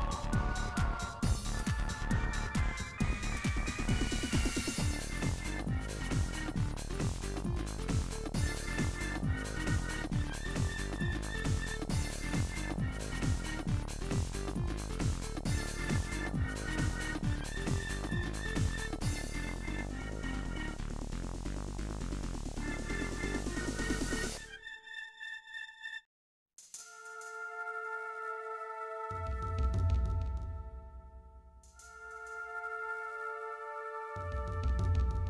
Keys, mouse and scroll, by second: 1.8 shift+d, 4.3 shift+d, 6.2 s, 6.8 click, 7.1 l, 7.7 s, 8.8 s, 9.4-9.8 scroll up 7, 9.8 shift+middle click, 10.0 g, 10.9 ctrl+z, 11.2 g, 12.4 click, 12.6 1, 12.7 click, 12.8 scroll up 1, 12.9 shift+middle click, 13.6 g, 15.5-15.9 scroll up 7, 15.6 shift+middle click, 15.9 shift+middle click, 16.1 g, 16.5 shift+middle click, 16.6 scroll down 10, 16.8 shift+middle click, 16.9 click, 18.2 scroll up 2, 18.5 shift+click, 18.8 scroll up 1, 19.1 click, 19.7 shift+middle click, 20.4 shift+middle click, 20.5 scroll down 1, 20.6-21.3 scroll up 8, 20.8 shift+middle click, 21.1 shift+middle click, 21.3 shift+middle click, 21.8 g, 22.2-22.6 scroll down 28, 22.6 shift+middle click, 22.8 scroll up 5, 23.0-24.4 shift+middle drag, 24.4 scroll down 6, 24.6 Left, 24.9 g, 25.4 shift+middle click, 25.5-26.2 shift+scroll up 11, 25.7 shift+middle click, 25.9 shift+middle click, 26.2 shift+middle click, 26.4 g, 27.0-27.7 scroll down 22, 27.7 click, 27.8 middle click, 28.0 scroll up 4, 28.2 shift+middle click, 28.8 click, 29.2-31.6 typing, 29.4 shift+middle click, 29.5 click, 31.8 scroll up 4, 31.9 shift+middle click, 32.5 click, 33.1 shift+d, 33.9 shift+middle click, 33.9 shift+scroll up 6, 34.1 shift+middle click, 34.6 g.